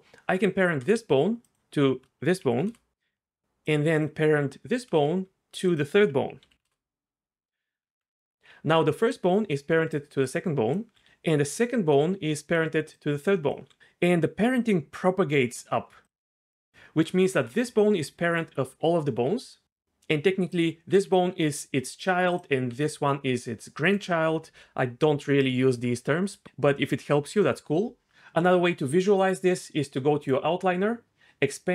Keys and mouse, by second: 1.5 shift+click, 2.4 ctrl+p, 3.6 click, 6.4 ctrl+p, 7.8 Tab, 8.4 d, 8.5-10.9 d, 10.2 click, 11.0-13.6 d, 11.6 click, 12.9 click, 13.8 ctrl+z, 13.8 g, 17.3 g, 20.9 g, 21.9 right click, 22.7 g, 30.2 click.